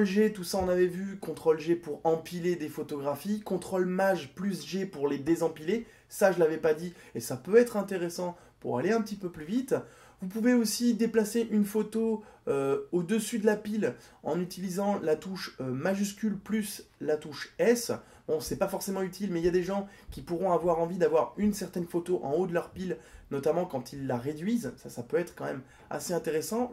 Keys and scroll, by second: 4.0 ctrl+shift+g, 15.4 shift+s.